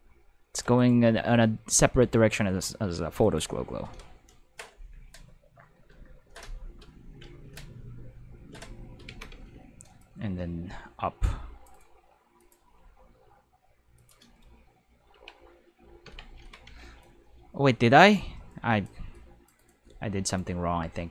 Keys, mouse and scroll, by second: 0.7 right click, 1.1 r, 3.2 click, 9.1 alt+a, 9.4 c, 10.0-11.7 drag, 11.7-12.4 right drag, 12.4 click, 12.7 r, 13.9 click, 15.1 Tab, 16.1 Tab, 16.2-17.3 typing, 17.0-18.8 drag, 19.1-19.4 drag, 19.6 right click, 19.6-21.1 typing, 20.2 right click.